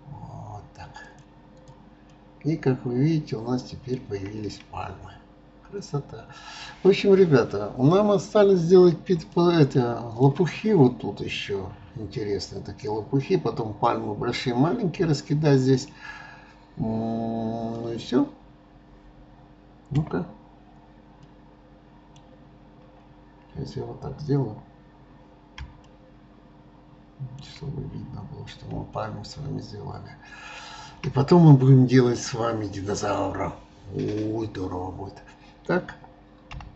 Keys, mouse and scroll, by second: 1.9-2.3 drag, 2.4-4.8 middle drag, 4.8-5.2 scroll up 2, 5.7 scroll up 1, 5.8-7.0 scroll down 1, 7.0 scroll down 1, 7.2-8.4 scroll up 1, 8.4-9.4 scroll up 1, 9.4-12.3 shift+middle drag, 20.0 KP_0, 21.3-22.5 middle drag, 22.5-22.9 scroll up 2, 23.5-25.5 scroll down 1, 26.0-28.0 shift+middle drag, 28.0-29.1 scroll up 1, 29.1-32.1 shift+middle drag.